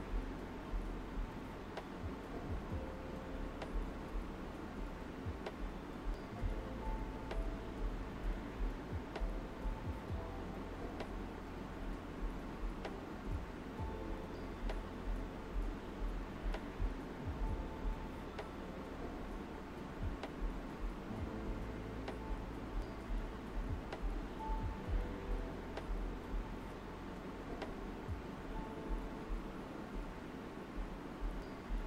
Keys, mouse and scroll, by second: 3.8 alt+right click, 4.7 alt+right click, 6.7 click, 8.4 right click, 10.9 alt+right click, 12.1 alt+right click, 13.0 alt+right click, 13.6 space, 13.7 click, 14.1 space, 14.7 click, 19.1 alt+right click, 19.9 alt+right click, 20.6 click, 22.8 alt+right click, 23.9 right click, 25.9 alt+right click, 26.7 click, 31.3 right click.